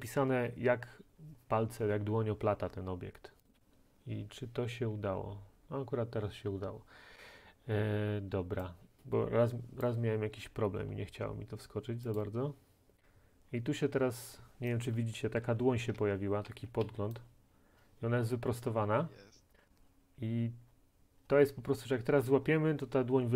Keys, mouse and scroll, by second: 3.5 click, 4.9-5.9 scroll, 9.8 click, 10.8 scroll, 12.2 click, 15.7-16.9 typing, 17.2 right click.